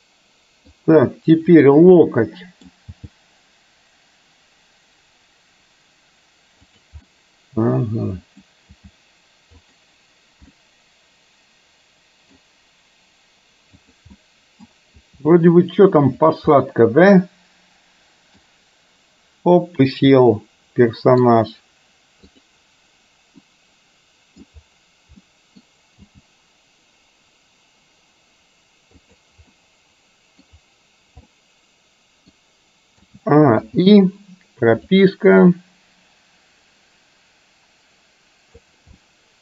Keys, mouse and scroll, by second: 2.1-2.7 middle drag, 2.9 g, 7.1-8.6 middle drag, 8.9 g, 10.7-12.5 middle drag, 13.9 click, 14.2 middle click, 15.0 r, 16.6-18.5 middle drag, 20.2-21.4 middle drag, 23.5-24.6 middle drag, 25.2-25.6 middle drag, 26.1 g, 29.6-30.5 middle drag, 30.5 scroll down 1, 31.4-32.4 middle drag, 33.1 a, 33.7 i, 35.1-38.7 drag, 39.0-39.4 middle drag.